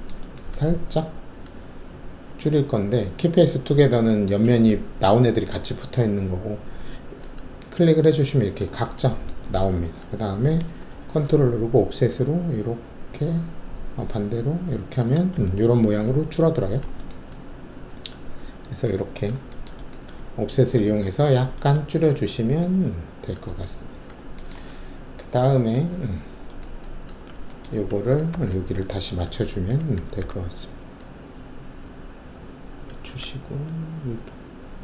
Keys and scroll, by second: 27.1 alt+`, 28.3 alt+1, 30.2 alt+r, 33.0 w.